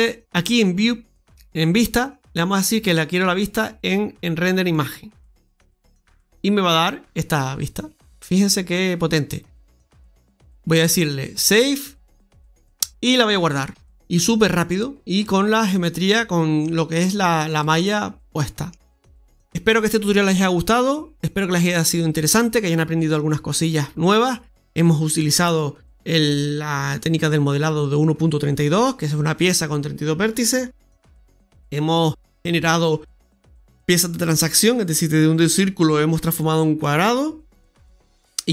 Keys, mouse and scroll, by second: 0.3 click, 2.5 click.